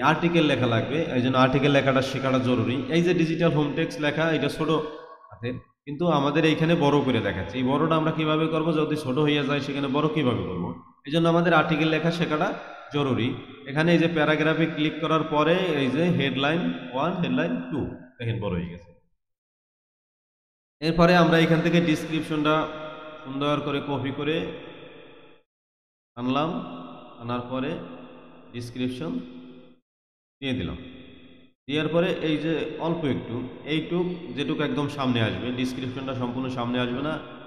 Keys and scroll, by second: 20.3 Return.